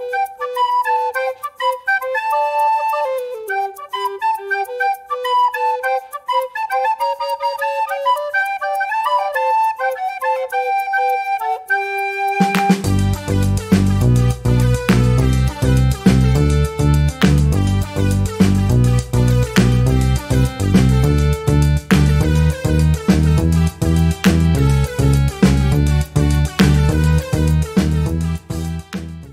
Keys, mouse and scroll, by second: 1.4 ctrl+d, 3.6 ctrl+shift+g, 8.5 click, 9.6 click, 11.2 click, 12.6-18.4 drag, 19.6 click, 20.6 3, 20.9 5, 21.3 Return, 22.8 scroll up 2, 24.3 ctrl+s, 25.2 5, 25.8 click.